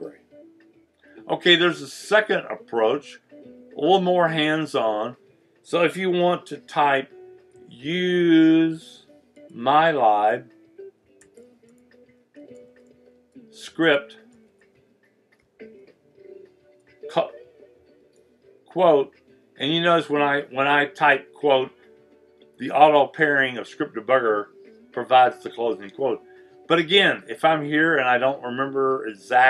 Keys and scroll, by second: 7.3-9.8 typing, 11.0-16.6 typing, 17.7-18.5 typing, 19.6 typing.